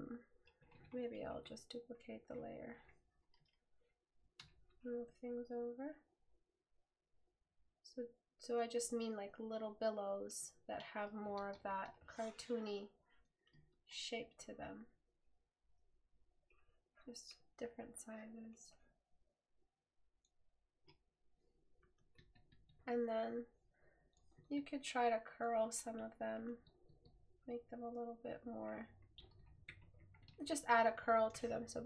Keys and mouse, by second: 23.3 right click, 25.9 right click.